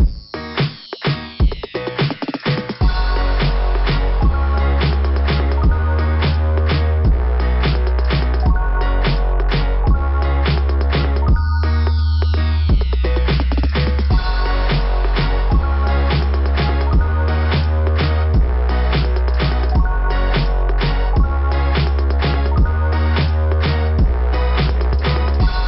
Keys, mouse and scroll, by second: 0.0-0.4 scroll down 3, 2.9-3.8 scroll up 4, 5.3 click, 6.3 click, 6.6 click, 6.9 click, 9.5 click, 10.1 click, 10.3 click, 11.9 click, 12.4 click, 12.5 click, 12.6 click, 12.7 click, 13.1 right click, 15.0 click, 17.0 right click, 18.9 click, 21.9 click, 24.3 click.